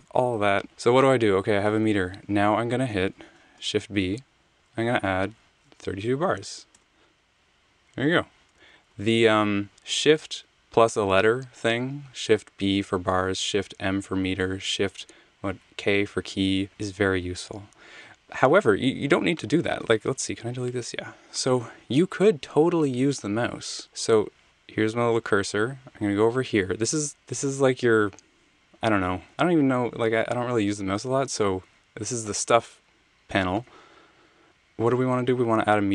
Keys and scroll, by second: 1.1 Escape, 3.5 b, 5.7-6.4 typing, 6.7 Return, 8.5 super+z, 9.0 super+z, 20.0 BackSpace.